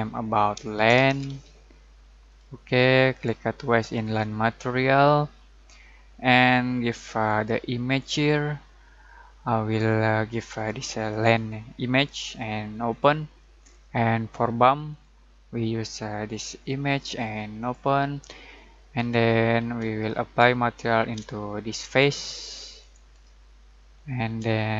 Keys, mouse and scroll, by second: 0.5-1.8 typing, 2.2 click, 6.4-7.4 drag, 10.9 click, 20.1-21.0 shift+middle drag, 21.8 ctrl+click, 24.0-24.6 middle click, 24.6-24.7 shift+middle drag.